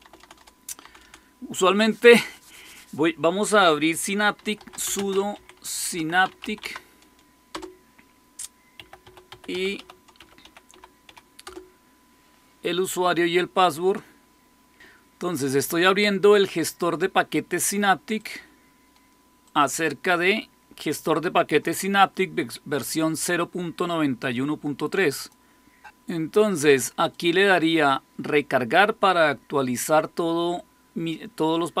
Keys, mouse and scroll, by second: 0.0-0.9 typing, 4.1-6.8 typing, 7.4 Return, 8.4-11.5 typing, 18.1 click, 19.4 click, 25.1 click, 27.0 click.